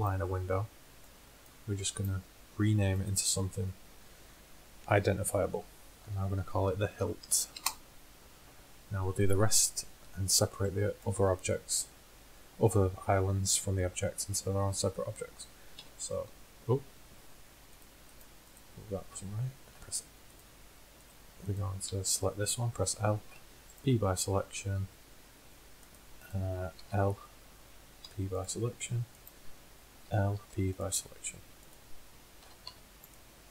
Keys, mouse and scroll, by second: 2.0-3.0 right drag, 3.7 right click, 9.4 right click, 10.0 Tab, 14.1-15.5 middle drag, 15.9 l, 17.2 middle click, 19.0 click, 19.8 l, 21.9 l, 23.4 p, 26.9 l, 28.1 p, 30.2 l, 30.4 p, 32.5 l, 32.7 p.